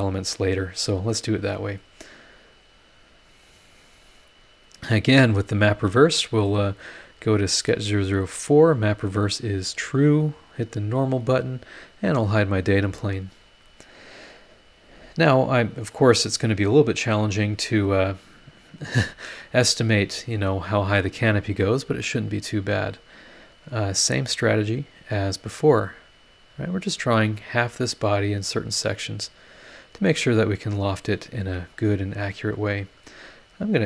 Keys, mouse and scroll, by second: 0.6-0.9 scroll up 2, 1.1 click, 2.6 click, 3.3 scroll down 2, 3.9-4.6 scroll up 4, 5.6 click, 6.8 click, 8.5 click, 8.9 click, 9.4 click, 10.6 click, 11.6 scroll up 2, 11.8 scroll down 2, 12.5 click, 12.7 space, 13.5 scroll up 2, 14.8 scroll up 2, 22.8 click, 25.2 click, 26.9 click, 27.6 scroll up 1, 29.5 click, 30.8 click, 31.4 Escape, 32.2-33.8 drag.